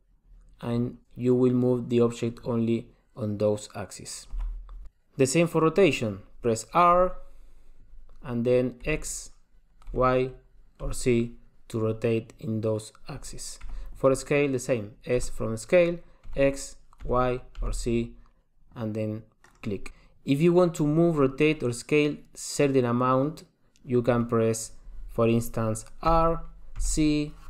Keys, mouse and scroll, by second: 4.8 alt+r, 6.9 r, 15.1 s, 20.1 super+z, 26.2 r.